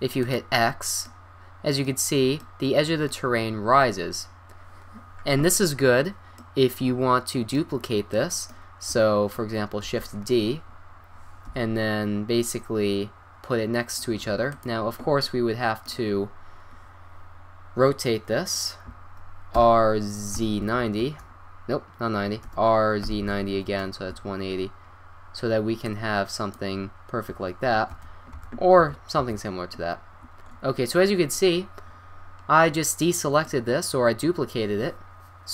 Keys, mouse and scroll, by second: 0.8 drag, 1.0-2.4 middle drag, 6.6-7.1 middle drag, 10.2 shift+d, 15.2 middle drag, 15.6-16.2 middle drag, 19.6 r, 22.5 r, 24.3-27.8 middle drag, 28.0 ctrl+z, 28.4 ctrl+z, 28.8 ctrl+z, 29.2 ctrl+z, 30.5 middle click, 33.6-35.5 middle drag.